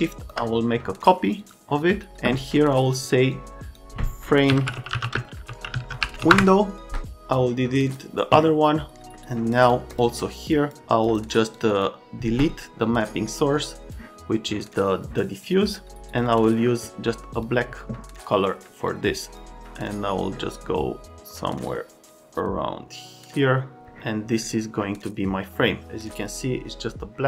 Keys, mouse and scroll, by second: 1.4 click, 2.9 click, 3.3 click, 4.2-6.5 typing, 7.3 click, 9.2 right click, 9.7 click, 9.9 click, 10.4 click, 11.0 click, 11.5 click, 11.7 click, 13.6 click, 15.4 click, 16.1 click, 16.2 click, 17.3 click, 18.9 click, 21.7 click.